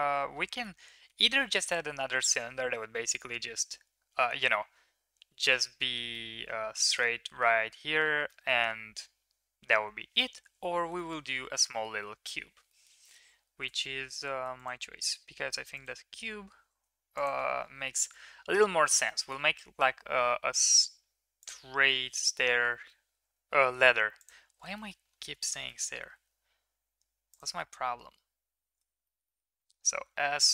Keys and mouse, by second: 6.1-7.4 middle drag, 8.2 middle drag, 10.9 shift+middle drag, 11.7 middle click, 12.0 Tab, 12.7 middle click, 13.6 3, 16.6 shift+s, 17.4 Tab, 17.9 middle drag, 18.8 shift+middle click, 19.3 shift+a, 22.6 s, 24.9 middle drag, 25.5 middle click, 25.7 middle click, 26.0 s, 27.7-28.9 middle drag, 29.0-29.5 middle drag, 29.7 middle drag, 30.0 s.